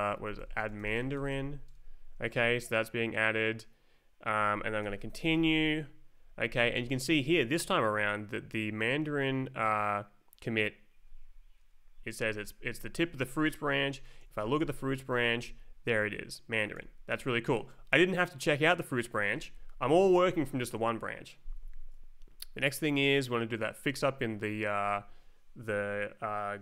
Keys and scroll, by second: 0.0-1.8 typing, 4.8 m, 5.3 Return, 6.2 Up, 11.6 shift+=, 13.8 shift+-, 14.2 Left, 14.4 Down, 14.6 Return, 16.7 Escape, 19.6 Up, 21.7 Right, 22.8 Down.